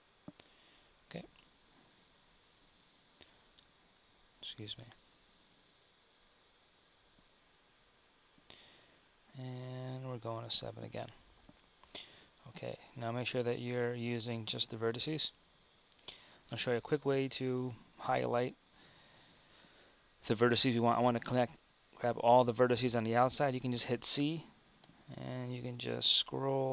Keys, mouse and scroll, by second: 2.4 shift+r, 3.7 z, 5.1 ctrl+r, 11.4 Tab, 12.0 Tab, 14.3-26.7 drag.